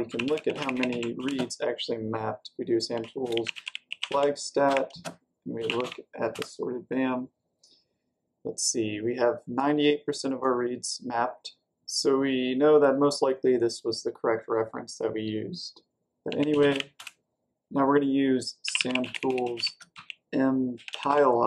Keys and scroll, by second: 0.0-1.6 typing, 2.6-6.1 typing, 6.3 Return, 16.0-17.1 typing, 18.3-21.4 typing.